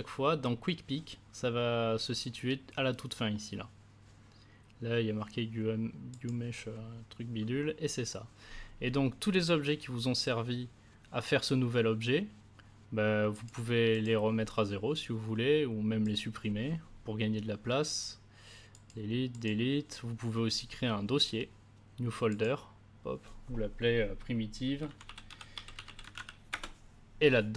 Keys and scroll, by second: 24.4-26.6 typing.